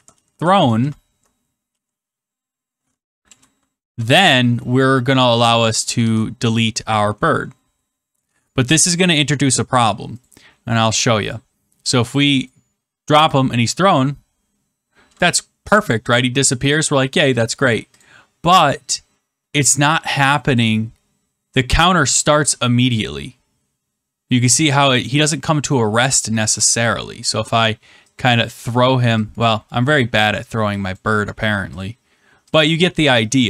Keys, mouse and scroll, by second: 0.0-1.5 typing, 2.6 typing, 3.2 Return, 3.8 typing, 4.0 Return, 5.9 ctrl+z, 8.1 click, 8.2 Tab, 10.2 click, 12.4 click, 13.3 click, 16.6 click, 17.9 click, 20.5 click, 25.6 click, 26.4 click, 28.4 click, 29.3 click, 30.4 click, 30.9 click.